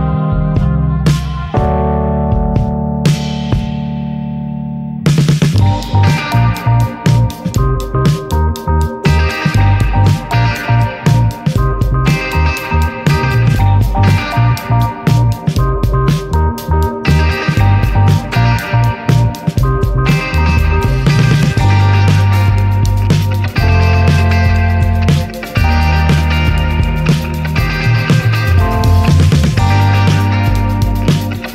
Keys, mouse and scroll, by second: 5.9 click, 8.2 click, 11.5 ctrl+d, 12.7 click, 13.6-18.6 drag, 22.6 shift+click, 24.5 ctrl+KP_Add, 26.5 shift+click, 29.5 ctrl+KP_Subtract.